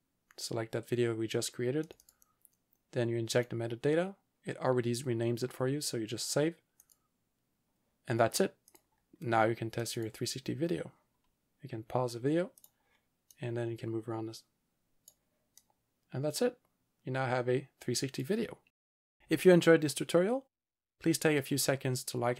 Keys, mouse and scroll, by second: 1.9 click, 6.9 click, 8.7 click, 10.0 double click, 12.6 click, 13.4 click, 15.6 click, 19.0 click.